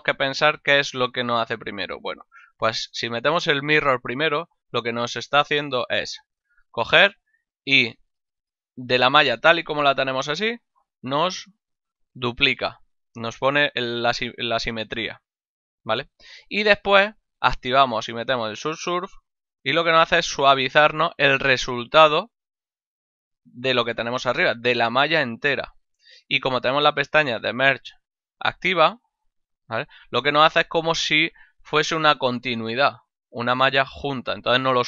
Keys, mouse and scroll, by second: 1.1 click, 1.6 ctrl+middle click, 5.0 middle click, 8.8 click, 9.6 middle click, 11.4 click, 15.2 middle click, 19.6 click, 28.3 click.